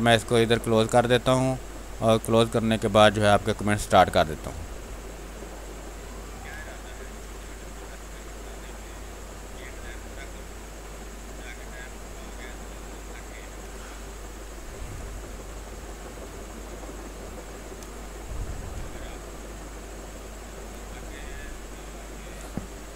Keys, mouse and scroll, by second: 4.0-7.4 drag, 7.4 click, 8.7 space, 9.0-13.5 alt+drag, 13.5 space, 13.8 click, 16.5 r, 16.7 click, 17.4 b, 17.9 space, 18.3 ctrl+click, 19.1-20.4 drag, 20.4 click, 21.0 space, 21.2 alt+click.